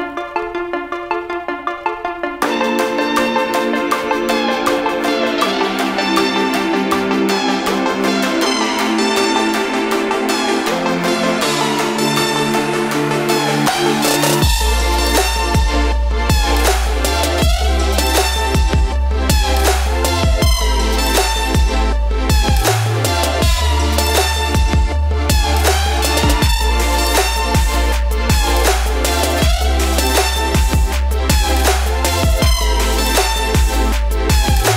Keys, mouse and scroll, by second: 2.2 right click, 4.7 click, 6.6-9.7 drag, 17.6 click, 19.9 click, 29.5 click, 30.5 typing, 31.2 Return, 33.1 click, 34.2 7.